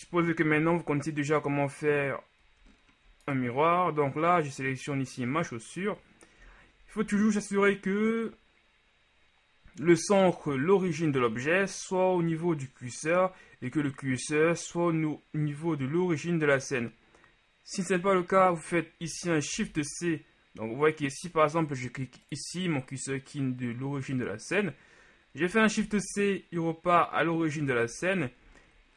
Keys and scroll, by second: 0.0 KP_Divide, 6.6 KP_1, 7.2 shift+KP_1, 19.8 shift+c, 26.0 shift+c.